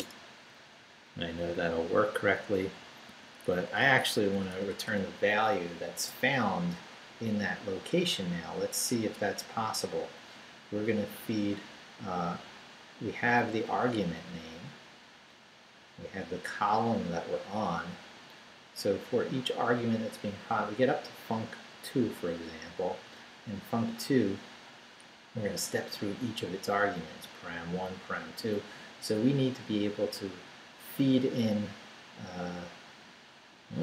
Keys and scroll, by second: 0.0 Return, 0.8 Down, 3.1 a, 3.4 BackSpace.